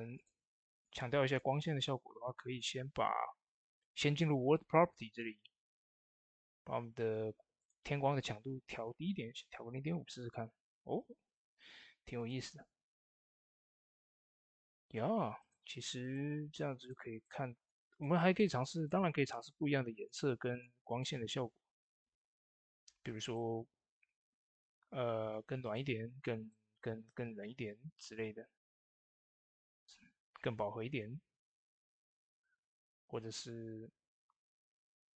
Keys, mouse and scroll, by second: 0.0 click, 5.9 click, 5.9 click, 12.0 click, 12.0 click, 14.6 click, 14.6 click, 23.1 click, 25.5-35.1 drag.